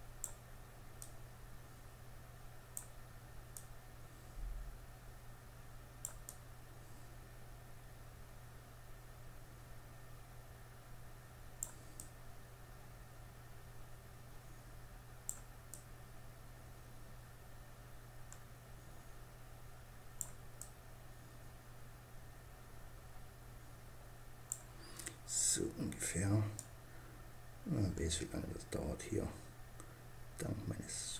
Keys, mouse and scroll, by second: 0.3-2.1 drag, 2.9-4.7 drag, 5.6-7.3 drag, 11.3-13.1 drag, 15.0-16.8 drag, 20.0-21.6 drag, 24.3-25.9 middle drag, 25.9-27.6 drag.